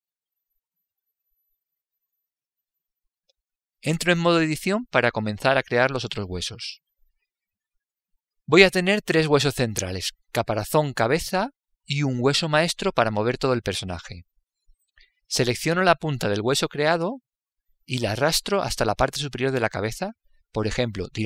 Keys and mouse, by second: 6.6 Tab.